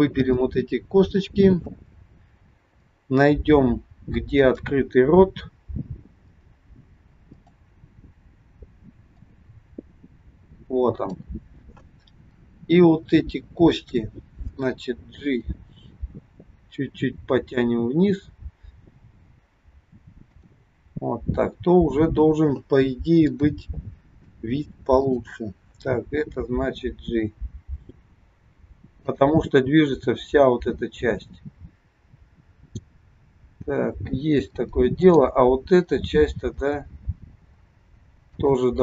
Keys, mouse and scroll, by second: 4.5 click, 6.4 click, 7.2 click, 8.0-9.4 scroll down 4, 9.4 click, 15.2 g, 23.2 click, 24.8 shift+click, 26.5 g, 33.3-34.1 scroll down 2, 34.1 scroll up 2, 35.0 click, 36.5 g.